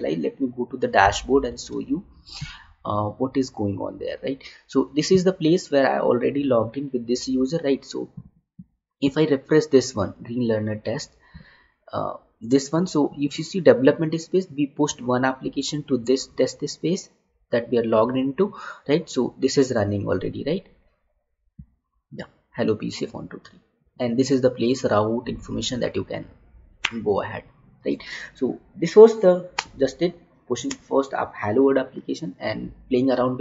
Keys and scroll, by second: 1.9 alt+Tab.